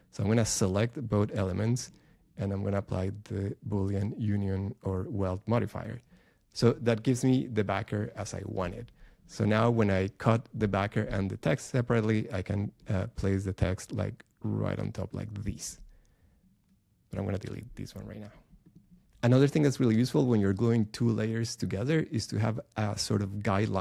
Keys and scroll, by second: 17.1 BackSpace.